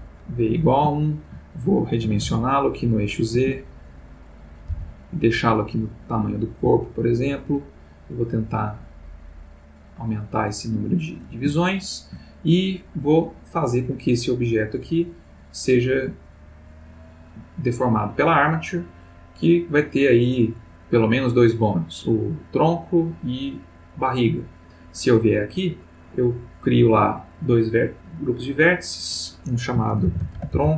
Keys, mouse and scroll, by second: 0.9 shift+middle click, 2.0 s, 2.2 z, 3.0 click, 3.3 s, 4.5 click, 4.7 g, 6.3 click, 6.6 s, 7.2 click, 8.3 click, 9.6-11.3 drag, 11.7-12.2 shift+middle drag, 13.8 click, 14.5 click, 15.2 click, 16.6 click, 17.7 click, 21.2 click, 22.8 click, 24.3 click, 26.0 click, 27.6 click, 28.1 click, 28.7 click, 30.0-30.5 typing.